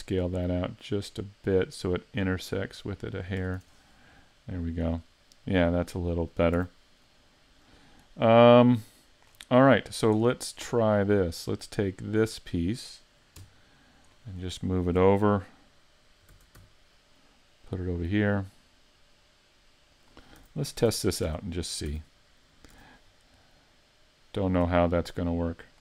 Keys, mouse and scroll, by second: 3.2 click, 3.4 a, 3.6 Tab, 3.8-4.2 scroll down 4, 4.2 middle click, 4.9-5.5 scroll down 2, 5.5 middle click, 6.6 a, 6.9 scroll down 1, 7.6-8.1 scroll down 3, 8.1 middle click, 9.3-9.7 scroll down 2, 9.7 middle click, 10.2-10.8 scroll up 9, 12.0 right click, 13.4 KP_1, 14.1-14.6 scroll down 4, 14.6 shift+middle click, 15.5 right click, 16.3 shift+d, 20.1 click, 20.4 a, 20.8 Tab, 21.3 Tab, 21.6-21.9 scroll down 7, 21.9 a, 22.7 a, 23.1 scroll down 2, 23.5 middle click, 25.7 shift+click.